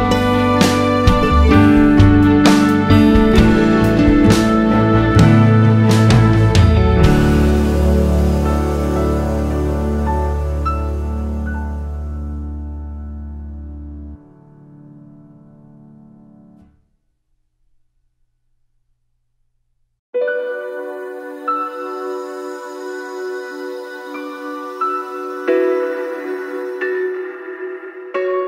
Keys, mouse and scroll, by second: 0.7 scroll down 1, 2.9 click, 4.5 click, 6.5 click, 7.9 click, 9.3 click, 9.7 scroll up 1, 10.5 scroll down 1, 11.1 scroll up 1, 14.0-15.7 drag, 16.8-17.1 drag, 17.4-18.5 drag, 20.6 click, 21.1 scroll down 1, 21.3 alt+a, 21.7-22.1 scroll up 2, 22.1 scroll down 1, 23.5 click, 24.7 click, 25.1 scroll down 1, 26.3 click, 26.9 click, 27.7 `, 27.9 scroll up 1.